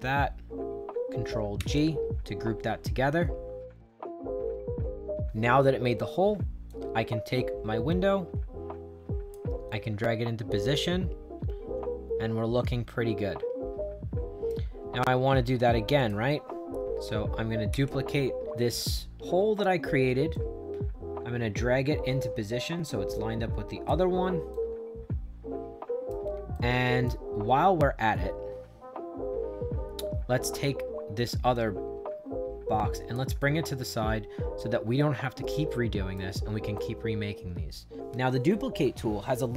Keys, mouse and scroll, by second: 1.5 ctrl+g, 6.6-9.2 drag, 9.6-14.4 right drag, 15.9 click, 17.6 ctrl+d, 20.2-23.8 drag, 24.4-26.0 right drag, 26.4 right click, 31.4-33.0 drag, 33.3-36.0 right drag, 36.6-38.0 right drag.